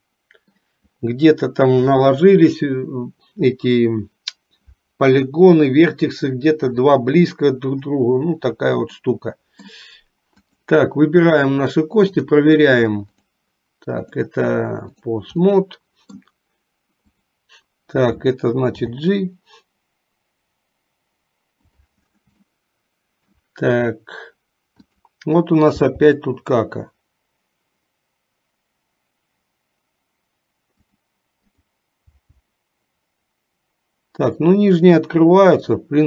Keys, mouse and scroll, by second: 9.2 middle click, 10.7 click, 12.2-13.6 drag, 14.1-15.2 drag, 15.7 middle click, 19.0 g, 22.6 shift+middle click, 25.9 g, 32.2 g.